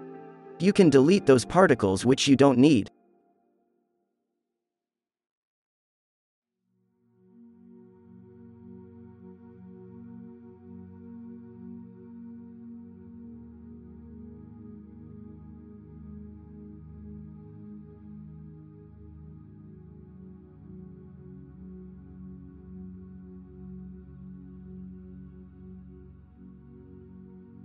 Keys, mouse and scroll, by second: 0.7 alt+a, 0.9 b, 1.6 Delete, 3.5 f, 5.8-10.9 drag, 6.8 f, 9.4 b, 10.6 ctrl+k, 10.8 ctrl+l, 11.4 Delete, 12.3 f, 13.0 f, 13.2-14.1 drag, 14.2 f, 16.0 f, 17.3 f, 18.1 f, 18.8 n, 20.3 f, 20.9 f, 21.4 f, 22.4 b, 23.5 ctrl+l, 23.9 Delete, 24.4 f, 25.2 drag, 25.4 f, 25.9 b, 26.9 ctrl+l, 27.2 Delete.